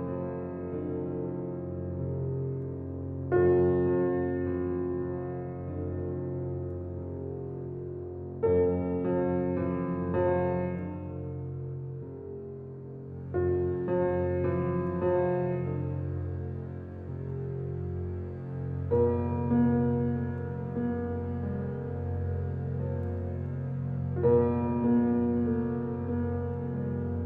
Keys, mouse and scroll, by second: 4.4 click, 4.6 Escape, 5.4 alt+click, 6.6-8.0 alt+middle drag, 8.0 click, 16.7 click, 18.8-19.1 scroll down 1, 19.4 click, 21.0 right click, 21.7 click.